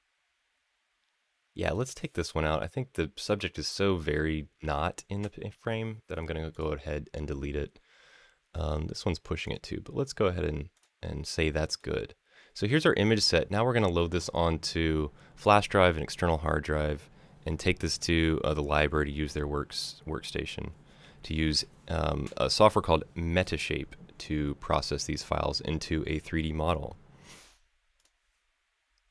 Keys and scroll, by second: 8.8 Delete, 13.1 Delete.